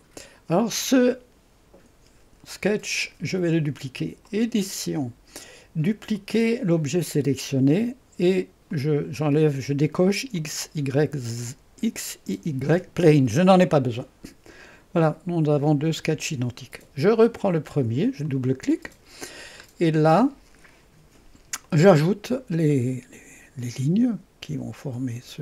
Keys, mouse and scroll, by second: 0.0 click, 4.3 click, 6.2 click, 8.7 click, 10.4 click, 13.3 click, 18.3 click, 18.6 click, 20.1-21.2 right drag, 21.7 click, 23.6 click.